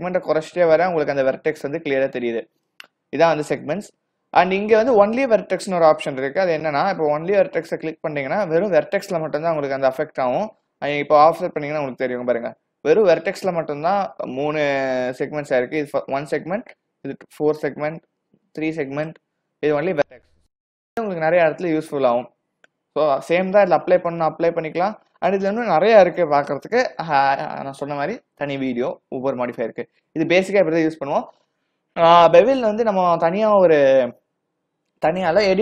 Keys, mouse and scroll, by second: 5.9 click, 7.8 click, 11.3 click, 15.0 click, 20.5 click, 21.5-22.9 scroll down 1, 22.9-23.5 scroll down 1, 25.3-25.6 scroll down 5, 25.6-28.3 scroll up 1.